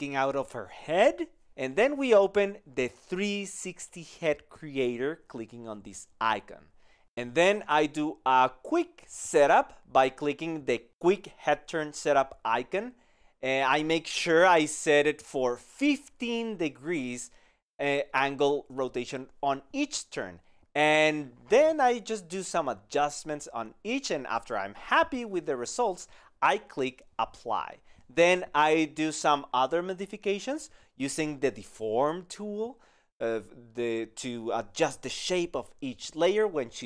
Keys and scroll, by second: 19.3 KP_1, 19.3 KP_5, 20.7 KP_1, 20.7 KP_5.